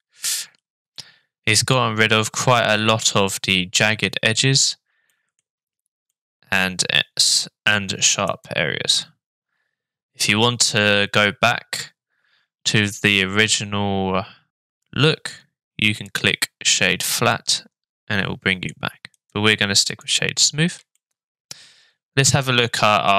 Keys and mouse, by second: 1.0-4.7 middle drag, 5.1 middle drag, 6.1-8.1 middle drag, 17.3-18.7 middle drag, 21.0-21.5 shift+middle drag.